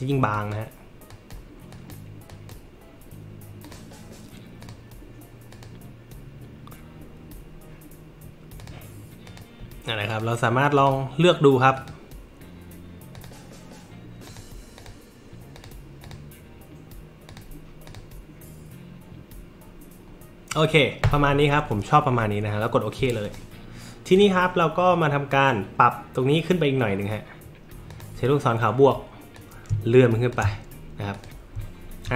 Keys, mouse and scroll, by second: 0.3 click, 1.1 click, 1.7 click, 2.3 click, 3.6 click, 5.5 click, 8.6 click, 9.2 click, 10.1 click, 10.8 click, 11.8 click, 14.3 click, 14.8 click, 15.5 click, 16.0 click, 17.3 click, 17.8 click, 23.2 click, 24.1 click, 27.9 click, 29.4 click, 31.1 click.